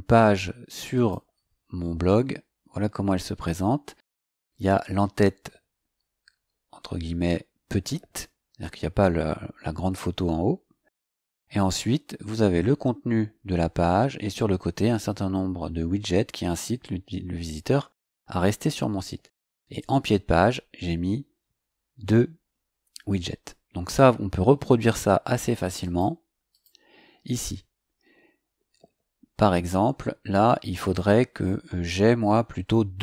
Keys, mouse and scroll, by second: 0.9 click, 9.0-9.4 scroll up 2, 10.7-11.1 scroll down 2, 12.3-13.4 scroll down 4, 13.6-14.4 scroll up 4, 15.1-18.5 scroll down 12, 19.3 scroll down 2, 25.8 click.